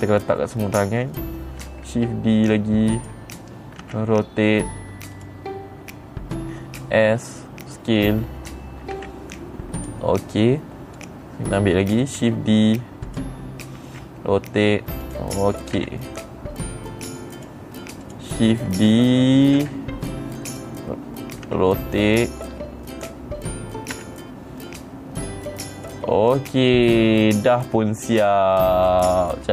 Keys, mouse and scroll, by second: 0.2 shift+middle click, 2.2 shift+d, 3.5 click, 4.4 r, 5.7 click, 7.2 s, 8.5 click, 9.5 g, 10.3 click, 11.5 click, 12.7 shift+d, 13.6 click, 14.4 r, 15.6 click, 16.3 g, 17.9 click, 18.6 click, 20.0 shift+d, 21.0 click, 22.0 r, 23.4 click, 24.5 g, 26.3 click, 26.9 click, 27.4 middle click, 27.4-28.5 scroll down 5, 29.4-29.5 middle drag.